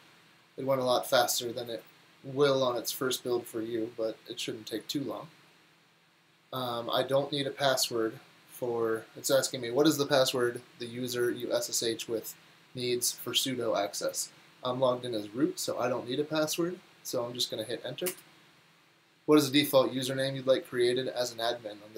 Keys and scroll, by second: 18.1 Return.